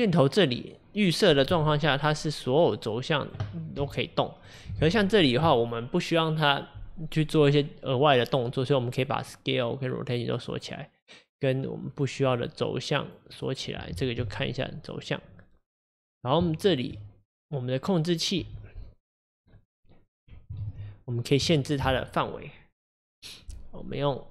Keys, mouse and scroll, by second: 1.5 g, 2.8-3.8 drag, 3.8 g, 9.3-12.3 drag, 13.1 click, 13.4 click, 14.2 g, 16.5-17.2 shift+middle drag, 17.2-18.2 scroll down 3, 18.4 g, 20.7 ctrl+z, 21.0-21.6 scroll up 3, 21.6-23.8 shift+middle drag.